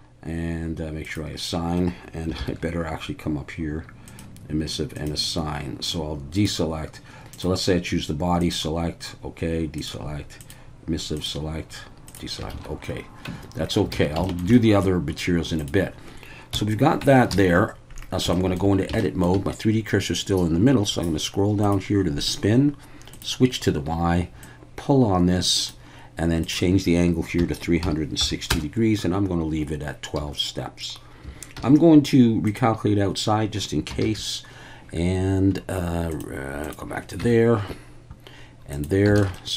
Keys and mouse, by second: 1.0 click, 2.4 ctrl+i, 4.1 click, 5.0 click, 6.4-7.4 drag, 8.4 click, 9.8-10.5 drag, 12.1 click, 12.5 alt+a, 13.3 Tab, 13.9 alt+a, 14.2 shift+middle drag, 14.5 middle drag, 15.6 drag, 16.5 KP_1, 17.0 Tab, 17.3 a, 18.3 shift+drag, 19.0 shift+drag, 21.6 click, 23.1 click, 24.4-25.7 drag, 26.4-30.2 drag, 30.2 a, 31.6 alt+n, 34.0 alt+a, 36.1 click, 36.7 click, 37.2 Tab, 39.2 alt+a, 39.3-39.5 middle drag.